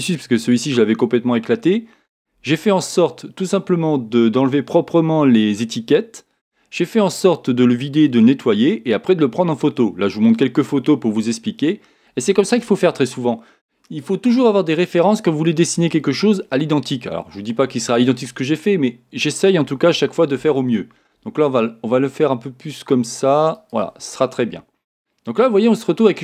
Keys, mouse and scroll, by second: 19.9 g, 20.6 g, 23.7 click, 24.4-26.2 middle drag.